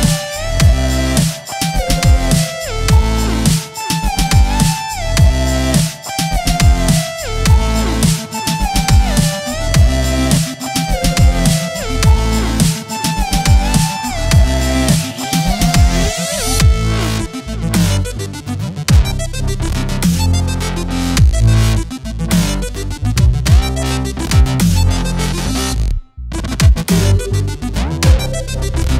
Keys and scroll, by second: 0.7 z, 3.9 space, 4.1 v, 10.0 z, 10.9 space, 12.3 v, 17.3-18.0 typing, 20.4 z, 21.4 v, 24.9 space, 26.8 space, 28.6 m.